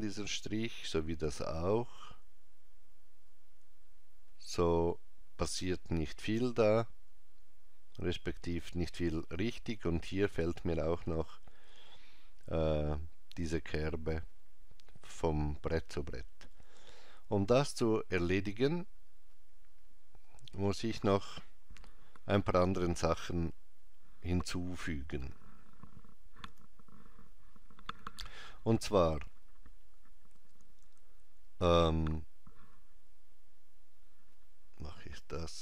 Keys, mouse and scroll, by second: 26.4 n.